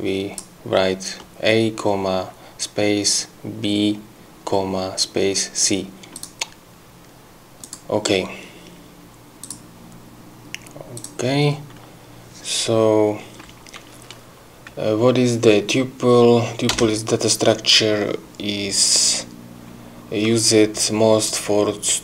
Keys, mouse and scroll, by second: 6.2 click, 7.6 click, 9.4 click, 11.0 click, 16.7 Return.